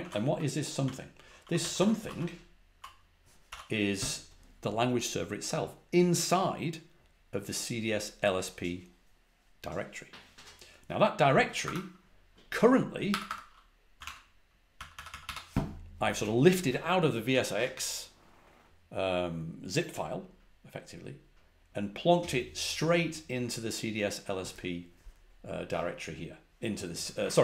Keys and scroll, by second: 0.7 i, 1.9 ctrl+v, 2.0 ctrl+l, 3.4 ctrl+l, 3.4 Up, 11.5 Escape, 12.6 Escape, 13.0 Escape, 13.2 Escape, 13.6-15.6 typing.